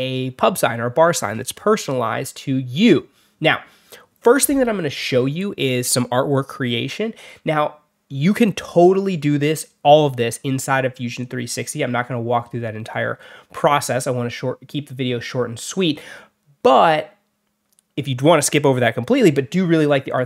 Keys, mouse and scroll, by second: 6.7 click, 7.3 shift+click, 8.0 shift+click, 9.1 click, 10.6 click, 11.0 click, 11.7 click, 12.6 click, 13.0 click, 13.8 alt+middle click, 14.9 click, 15.4 alt+middle click, 17.1 click, 18.9 click.